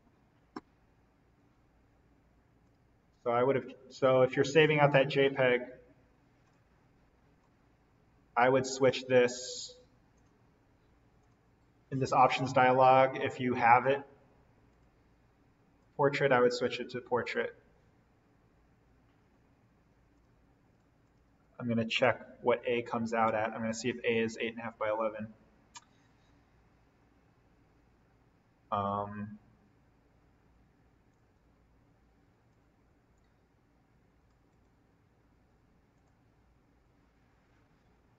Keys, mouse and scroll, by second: 2.6 click, 4.8 click, 10.2 click, 14.7 click, 20.1 click, 21.3 2, 21.9 click, 32.8 click, 34.4 right click, 35.9 click.